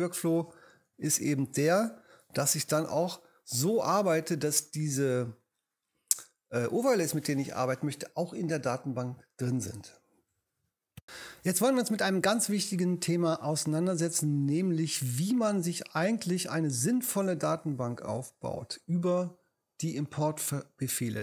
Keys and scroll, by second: 1.4 alt+super+z.